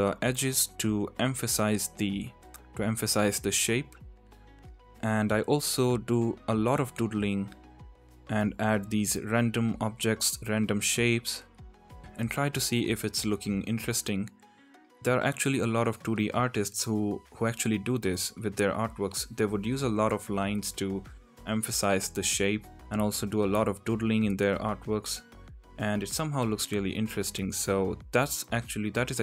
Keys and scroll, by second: 7.0 ctrl+z, 7.0 ctrl+z, 13.0 ctrl+z, 13.1 ctrl+z, 16.4 ctrl+z, 16.5 ctrl+z, 18.0 ctrl+z, 19.4 Tab, 19.8 x, 20.0 Tab.